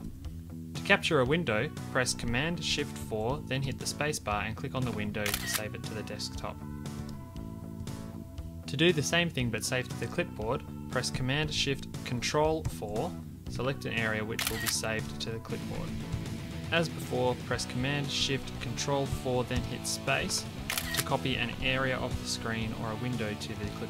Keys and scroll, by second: 3.0 shift+super+4, 12.6 ctrl+shift+super+4, 16.1 super+v.